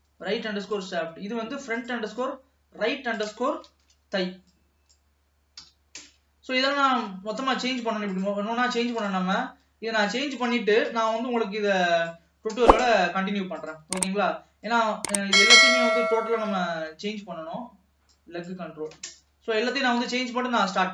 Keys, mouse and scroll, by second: 0.1 middle click, 1.0 click, 1.8-5.0 drag, 7.1 ctrl+s, 7.8-8.2 scroll up 1, 8.2 click, 9.2-12.2 drag, 13.7 click, 14.8-17.9 drag, 20.6 ctrl+s.